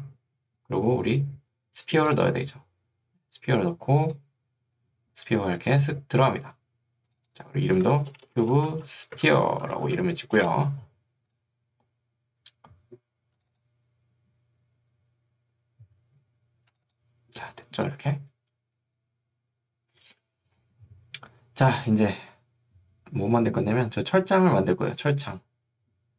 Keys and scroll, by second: 8.2-10.5 typing.